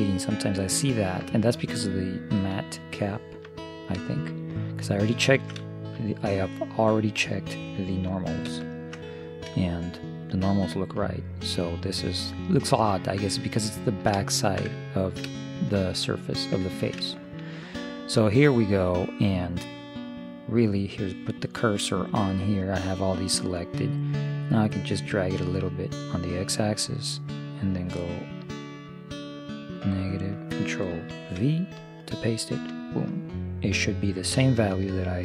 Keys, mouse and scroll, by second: 0.1-4.5 middle drag, 8.5 ctrl+KP_1, 10.0-11.5 middle drag, 14.2-19.1 middle drag, 20.8-22.6 drag, 24.3-26.1 drag, 27.3-29.2 drag, 34.9-35.2 middle drag.